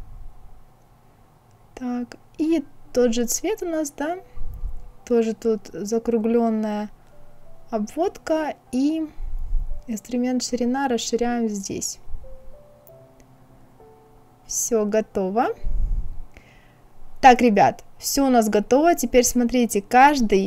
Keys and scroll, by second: 2.3 Escape.